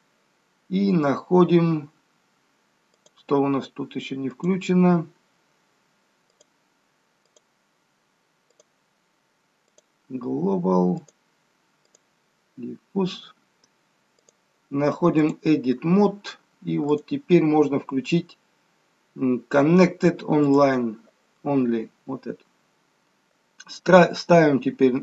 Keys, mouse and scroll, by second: 3.1 click, 6.3 click, 8.5 click, 14.2 click, 16.9 click.